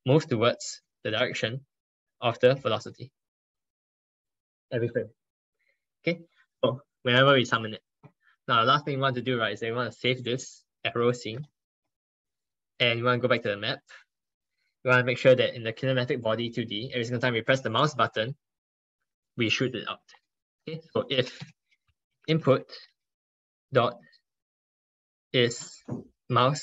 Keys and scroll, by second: 9.4 ctrl+s.